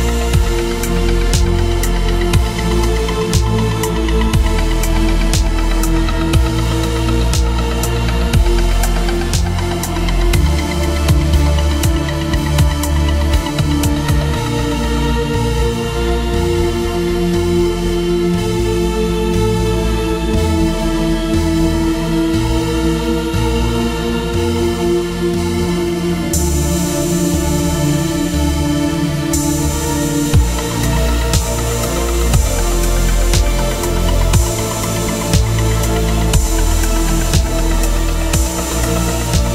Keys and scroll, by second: 2.1 ctrl+z, 4.2 ctrl+z, 4.7 ctrl+w, 13.5 Return, 16.3 ctrl+t, 26.2 Return, 26.4 Down, 27.8 Right, 28.2 Up, 29.8 Down, 30.3 Left, 30.5 Return, 31.5 Down, 32.2 Left, 32.7 Down, 34.0 Up, 34.8 Up, 35.0 Right, 35.0 Up, 35.2 Return, 35.9 ctrl+Tab, 36.8 alt+Tab, 38.0 space.